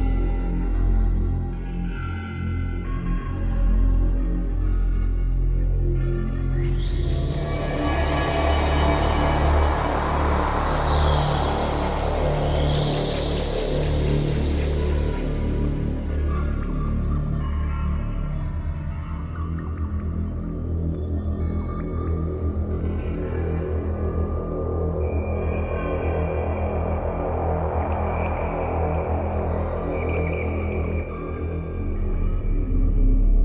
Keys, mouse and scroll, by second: 4.4 click, 6.1 click, 6.6 click, 7.7 click, 8.7 click, 10.1 click, 10.3 click, 10.8 click, 11.2 click, 11.7 click, 12.9 middle click, 25.4-25.7 scroll up 1, 27.1 click, 28.3 click, 29.7 middle click.